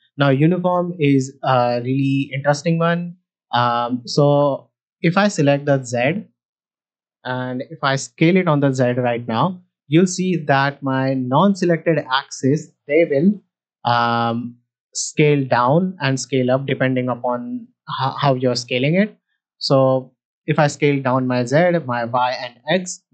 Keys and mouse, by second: 8.0 s, 8.1 z, 11.1-13.2 right drag, 13.3 s, 13.7 right click, 14.0 s, 14.2 z.